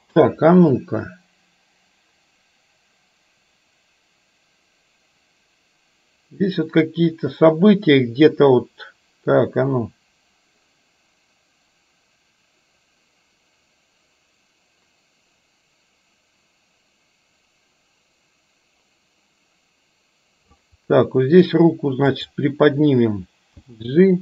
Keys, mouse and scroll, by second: 0.7-20.6 drag, 22.2 click, 23.6 g.